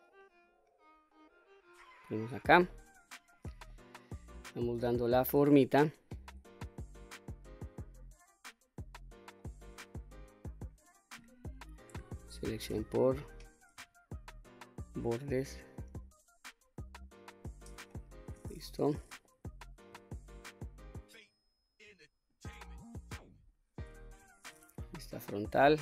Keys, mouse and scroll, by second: 2.3-2.7 scroll down 1, 2.7 middle click, 3.7 middle click, 4.3 scroll up 2, 5.6 q, 6.4-6.8 scroll down 1, 6.8-9.3 middle drag, 10.1 middle click, 12.2 2, 12.5 click, 14.3 alt+click, 15.7 alt+shift+click, 17.0 alt+shift+click, 17.9 middle click, 19.2-19.9 middle drag, 21.1 shift+click, 22.3 alt+shift+click, 23.4 alt+shift+click, 24.0 middle click, 24.8 KP_1, 25.6-25.8 scroll up 1.